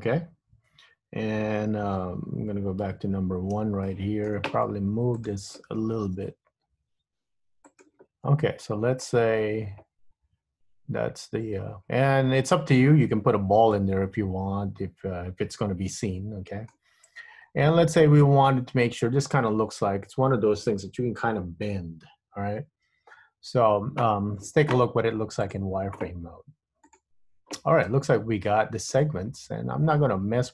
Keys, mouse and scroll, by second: 3.0 KP_1, 3.9 shift+middle click, 5.2 click, 6.4 g, 8.2 scroll up 2, 8.4 scroll down 3, 8.5-9.1 scroll down 6, 9.2 middle click, 13.9 middle click, 17.0-17.6 scroll up 2, 17.6-18.0 scroll down 2, 18.3 shift+middle click, 18.7 shift+middle click, 19.9 Tab, 23.1 scroll up 2, 25.5 click, 29.2 middle click.